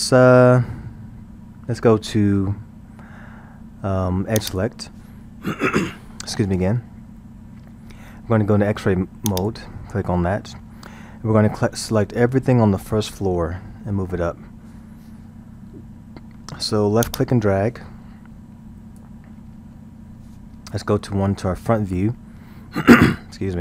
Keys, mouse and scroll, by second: 4.4 click, 9.3 click, 17.1 click, 21.7 KP_1.